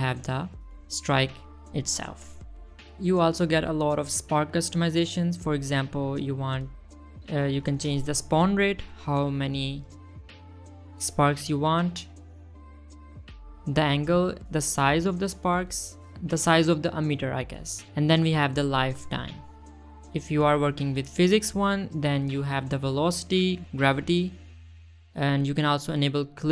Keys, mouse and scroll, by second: 0.1 space, 0.7 scroll up 1, 0.8-1.3 middle drag, 1.4 scroll down 1, 1.6 middle click, 3.1 click, 4.4 middle click, 6.6 shift+middle drag, 6.8 middle drag, 7.0-7.4 scroll up 1, 7.4 middle drag, 7.6 shift+middle drag, 9.4 click, 9.6 click, 10.6 click, 10.9 space, 11.6 space, 12.2 click, 12.8 space, 13.8 click, 14.0 space, 14.3 space, 15.0 space, 15.7-17.5 drag, 17.9-18.9 shift+drag, 19.5-20.6 drag, 21.3 middle click, 21.7 middle click, 23.7 click, 25.0 click, 26.0-26.5 drag.